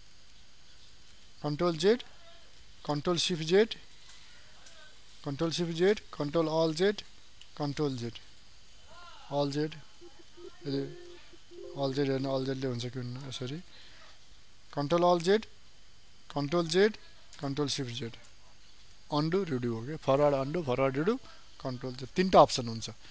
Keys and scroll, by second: 3.3 ctrl+shift+z, 6.2 ctrl+alt+z, 7.4 ctrl+z, 9.7 alt+z, 12.1 ctrl+z, 15.0 ctrl+alt+z, 16.6 ctrl+z, 17.6 ctrl+shift+z, 22.0 ctrl+z.